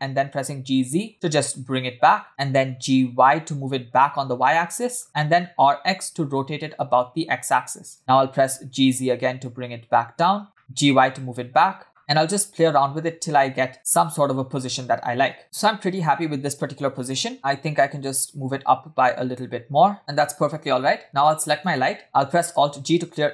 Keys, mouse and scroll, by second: 2.7 g, 5.7 r, 8.3 g, 12.0-13.7 typing, 17.3 click, 17.3 space, 17.6 g, 20.7 space, 21.5 click, 22.5 alt+g.